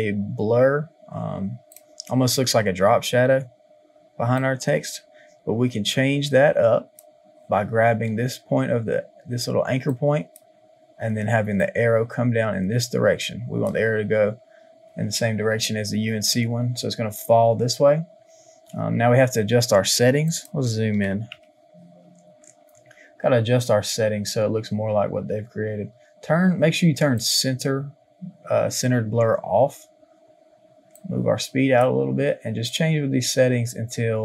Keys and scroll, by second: 21.0 KP_1, 21.0 KP_0, 21.2 KP_0, 21.3 Return.